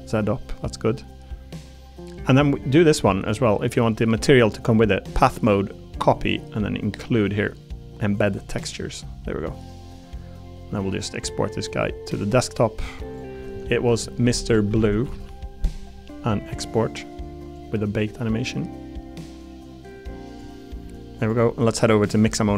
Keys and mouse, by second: 21.2 click.